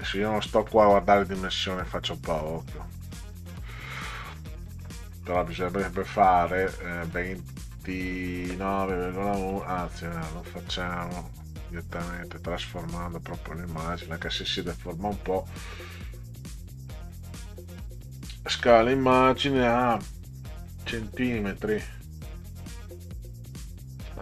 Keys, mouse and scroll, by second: 1.6 click, 4.2 click, 8.1-9.6 drag, 10.1 click, 11.4 click, 13.8 click, 20.4 click, 21.6 click, 22.7-23.9 drag.